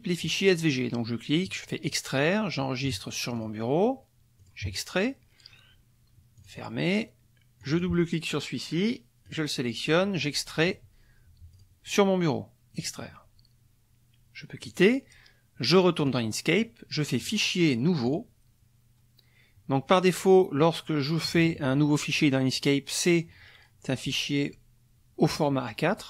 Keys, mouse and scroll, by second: 1.8 click, 3.3 click, 4.4 click, 6.4 click, 7.6 click, 9.2 click, 10.1 click, 11.5 click, 12.7 click, 14.6 click, 16.0 click, 17.2 click, 18.0 click, 21.2 KP_Subtract.